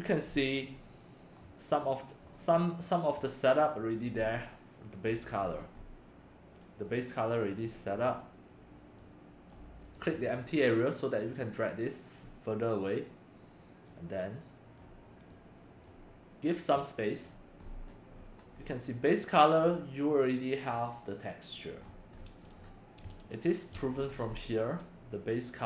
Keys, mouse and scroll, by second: 1.4-2.2 right drag, 2.2 click, 2.7 middle click, 4.2-4.5 scroll down 4, 5.4-6.8 scroll down 6, 7.4 click, 8.0 click, 9.0 click, 9.8 click, 10.0 click, 10.2 click, 11.4 click, 13.9-14.9 drag, 15.3 click, 16.9 click, 17.7-19.7 middle drag, 17.7-18.7 scroll, 21.8 middle click, 21.8-22.6 scroll, 23.7 shift+middle drag, 24.0 scroll up 5, 24.2 scroll, 24.3 scroll up 1, 24.3 scroll, 24.4 scroll, 24.7 scroll.